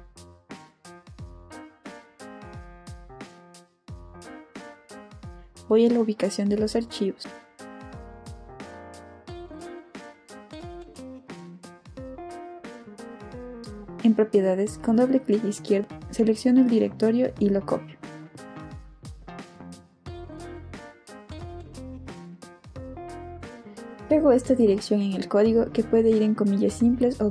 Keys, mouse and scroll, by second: 1.2 space, 5.2 click, 7.4 click, 8.9 click, 11.2 click, 12.4 click, 12.5 right click, 14.2 click, 15.5 click, 16.9 click, 18.2 right click, 19.9 click, 21.5 click, 23.2 click, 24.5 click, 24.9 middle click, 24.9 right click, 26.9 click.